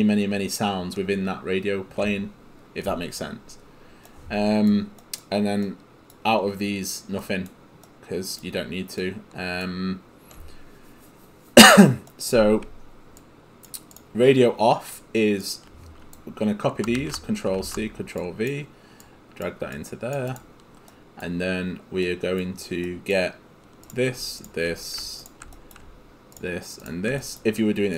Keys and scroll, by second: 17.0 ctrl+c, 17.6 ctrl+v.